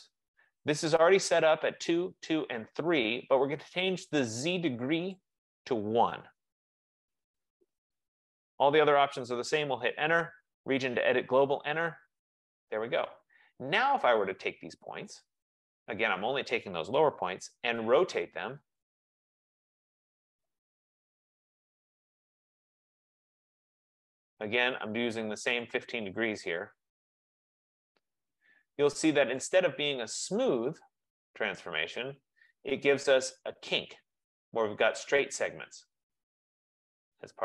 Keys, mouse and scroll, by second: 5.2 click, 6.4 1, 6.8 Return, 7.2-9.2 drag, 9.7 Return, 11.3 Return, 15.2 click, 17.9-21.0 typing, 18.9-20.3 drag, 23.6 click, 25.7 click, 26.9 click, 27.3 typing, 27.8 Return, 29.4 click, 30.0-30.6 scroll, 30.6-31.2 scroll, 32.3-32.9 scroll, 34.1-34.4 scroll.